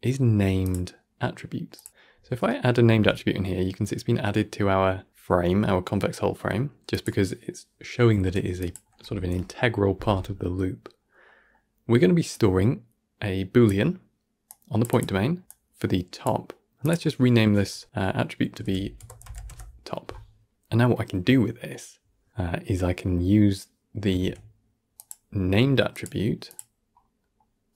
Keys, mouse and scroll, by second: 1.9-2.4 scroll up 2, 2.4 middle click, 2.8 g, 12.2-20.5 drag, 20.5-20.8 scroll down 1, 20.8-24.1 middle drag, 24.1 shift+a, 26.7-27.1 scroll up 2, 27.1-27.6 middle drag, 27.6-27.7 drag.